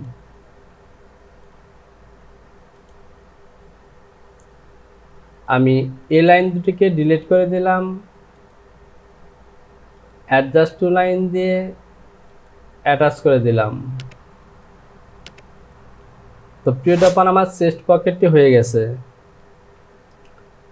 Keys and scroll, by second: 19.6 j.